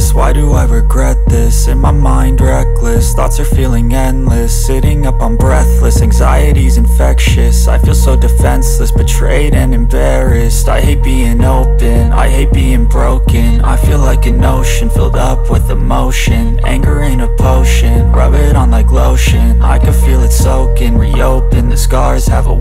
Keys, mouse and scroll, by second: 0.3 w, 2.3 w, 2.9 w, 4.7 w, 5.5 w, 7.2 Escape, 8.2 click, 9.6-14.6 right drag, 10.8 w, 12.7 w, 15.1 Escape, 16.2 click, 17.6-19.2 right drag, 20.5 Escape, 21.2 click.